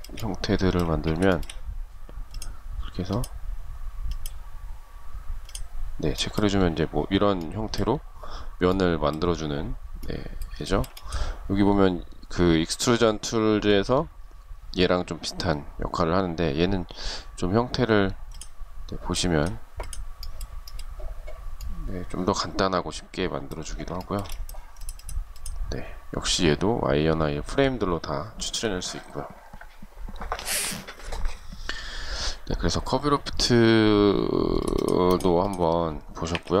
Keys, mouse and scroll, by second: 0.0 space, 0.4 shift+scroll down 1, 0.5 shift+middle click, 9.9 shift+middle click, 23.2 shift+middle click, 35.3 Delete.